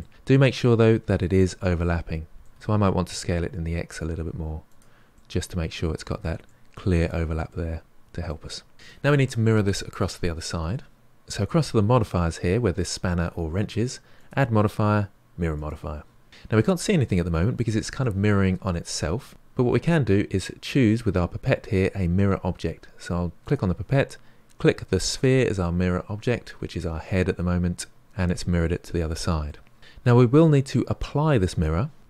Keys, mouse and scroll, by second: 1.2-2.5 middle drag, 2.5 s, 5.1-11.0 middle drag, 11.0 click, 23.4 click, 26.6-28.6 middle drag.